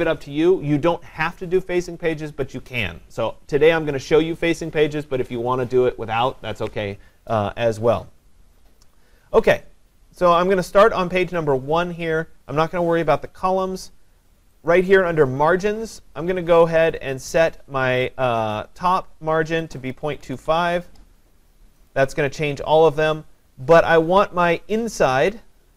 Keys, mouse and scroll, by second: 14.7 click, 17.1 click, 19.7-21.0 typing, 21.9 click.